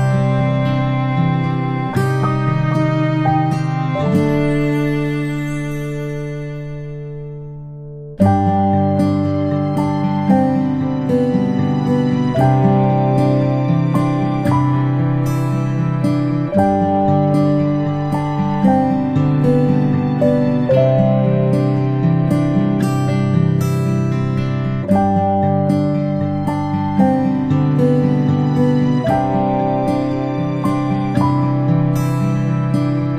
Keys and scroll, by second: 19.8 ctrl+shift+[, 20.3 ctrl+].